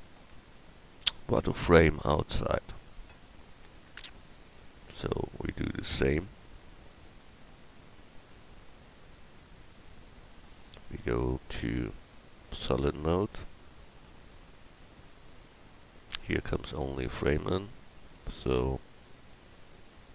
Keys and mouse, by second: 10.4 KP_1.